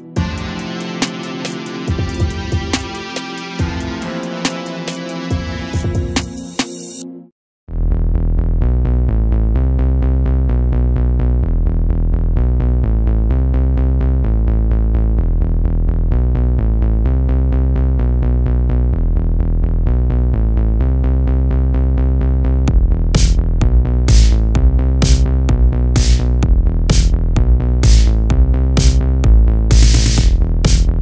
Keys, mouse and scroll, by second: 9.1-12.1 drag, 12.7 a, 12.9 a, 13.1-13.7 scroll down 2, 13.7 scroll down 2, 13.7 shift+middle click, 14.6-15.6 scroll up 4, 15.6-16.2 shift+middle drag, 16.2 click, 16.7 Tab, 18.1 l, 18.9 g, 20.4 a, 20.6 a, 20.8 Tab, 21.2 a, 21.4 a, 21.7 click, 23.0-23.5 drag, 23.5-23.9 scroll up 1, 23.9-26.9 drag, 27.6 click.